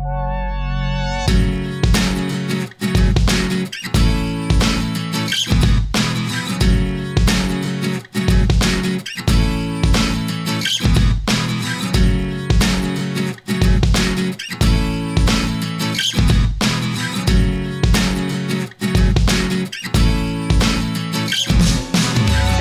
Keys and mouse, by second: 0.4 e, 3.0 e, 5.4 e, 8.7 s, 12.1 g, 14.2 e, 18.0 Tab, 18.4-20.9 middle drag.